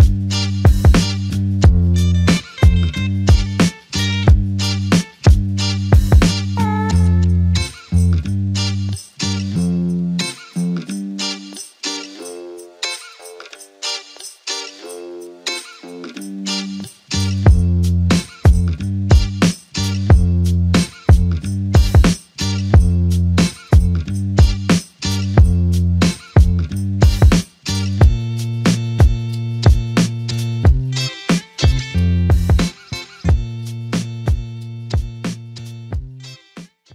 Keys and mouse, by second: 3.7 shift+click, 5.8 double click, 9.3 shift+click, 13.6 alt+click, 17.2 alt+click, 19.2 double click, 21.4 shift+click, 24.8 shift+click, 32.6 alt+click.